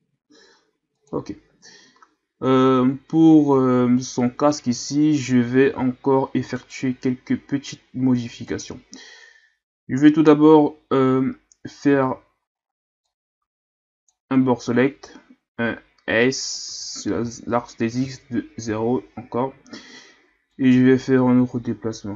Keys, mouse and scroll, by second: 1.9-2.6 ctrl+scroll up 2, 2.6-3.2 scroll up 1, 3.5-4.4 ctrl+scroll down 2, 4.9-5.7 scroll up 3, 5.7 z, 6.5 right click, 8.5 right click, 11.9 b, 16.7 s, 20.5-22.1 drag.